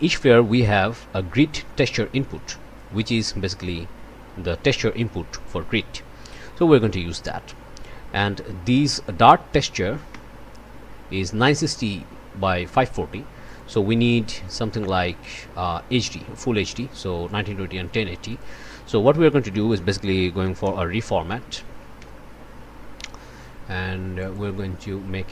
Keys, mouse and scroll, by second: 0.7-3.0 drag, 4.9 click, 6.3 Delete, 6.7 click, 7.4 click, 8.2-9.4 drag, 10.1 1, 13.4 click, 13.7 1, 14.4 click, 14.7 1, 17.2 click, 17.4 1, 18.3 click, 19.3 Tab, 20.1-21.5 typing, 22.0 Return, 24.2-24.5 scroll up 1.